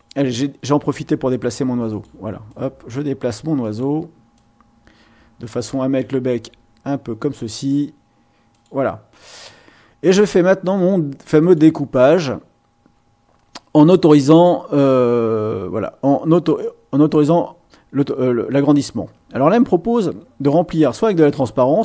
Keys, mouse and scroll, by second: 1.9 click, 2.5-4.0 drag, 4.3-7.5 drag, 8.5 click, 11.4 click.